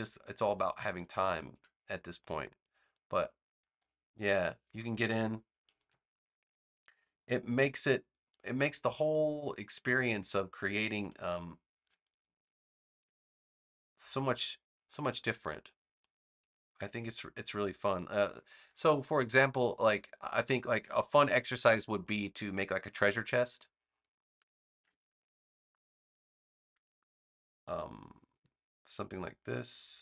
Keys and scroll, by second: 20.9 BackSpace.